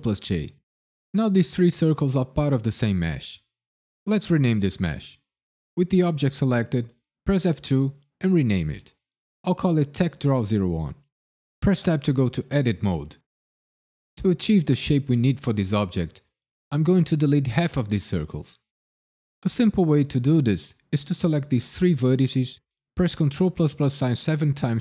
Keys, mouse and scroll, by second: 7.4 F2, 11.4 KP_Decimal, 11.8 Tab, 20.6 click, 23.0 ctrl+KP_Add, 23.3 ctrl+KP_Add, 23.9 ctrl+KP_Add, 24.1 ctrl+KP_Add, 24.6 ctrl+KP_Add.